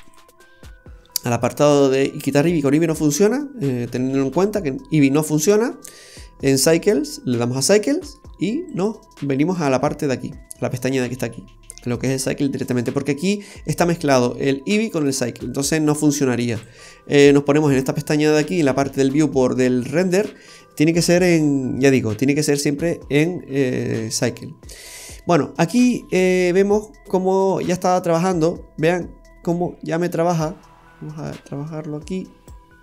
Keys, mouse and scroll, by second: 1.5 click, 7.4-7.8 scroll down 3, 7.7 middle click, 8.7 click, 13.2 click, 16.5 click, 19.8-20.5 scroll down 2, 20.2 middle click, 21.3 shift+middle click, 22.0-22.6 scroll up 1, 22.6-23.3 scroll up 1, 27.4 click.